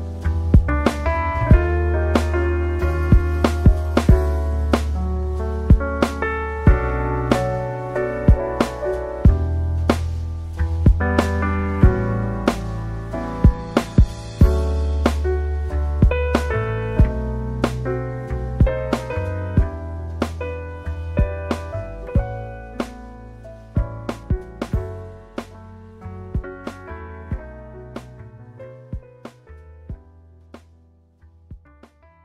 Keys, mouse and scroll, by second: 1.8 click, 8.9-10.7 typing, 13.1 click, 16.4 click, 18.8 ctrl+z, 26.0-27.4 middle drag, 28.2-28.9 scroll up 2, 28.9 middle click, 29.2 scroll down 2, 30.8 click.